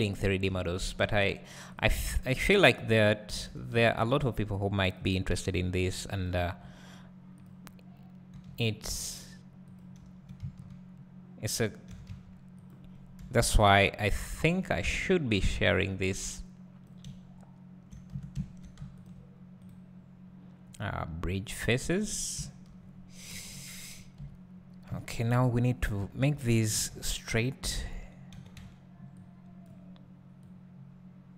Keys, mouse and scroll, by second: 0.7-1.7 scroll down 2, 2.1 `, 3.5 3, 3.7 z, 4.9 click, 6.2-7.4 drag, 6.3 z, 9.8 click, 10.0 s, 12.7 click, 13.2 KP_7, 14.5-15.5 scroll up 2, 15.5-19.0 drag, 21.6-25.9 right drag, 22.1-22.4 scroll down 2, 22.4 `, 23.3 KP_1, 24.7 KP_3, 25.9 click, 26.2 1, 26.7 alt+a, 27.7 n, 30.4-31.3 drag.